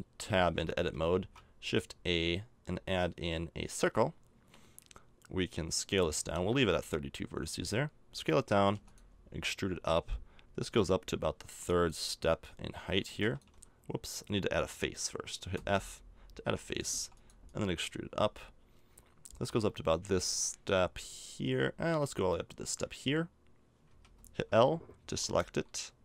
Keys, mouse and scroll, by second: 0.5 Tab, 1.1 shift+a, 6.2 s, 8.7 e, 10.7-14.5 drag, 15.5 f, 16.9 e, 17.4-20.1 drag, 23.9 a, 25.0 l, 25.5 l.